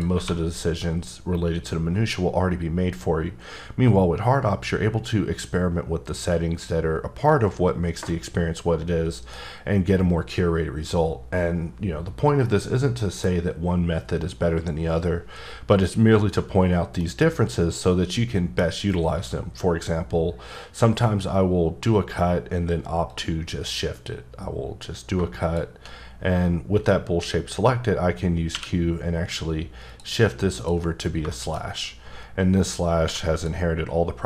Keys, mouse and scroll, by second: 0.1 1, 16.2 1, 17.0 middle click, 23.1 click, 28.5 q, 29.8 click, 31.3 shift+middle click, 31.5-32.1 scroll up 5, 33.0 h, 33.3 click.